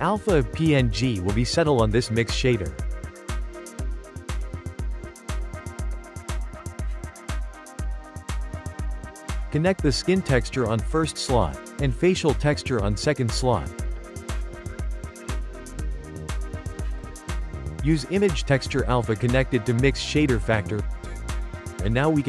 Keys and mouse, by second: 4.5 click, 5.7-6.8 ctrl+middle drag, 6.8 click, 7.1 g, 7.9 click, 8.0 g, 9.3 click, 9.9-10.3 shift+middle drag, 10.3 click, 13.3 click, 15.4-18.7 shift+middle drag, 18.7 click.